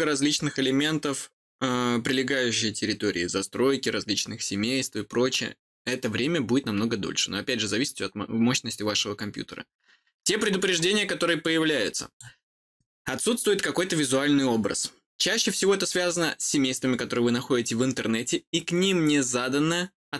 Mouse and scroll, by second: 11.4 click.